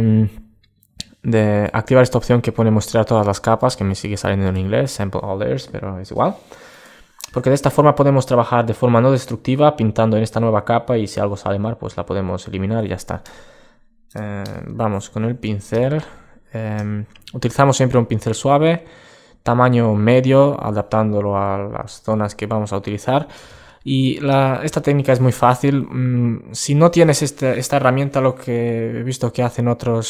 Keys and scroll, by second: 21.8 super+space.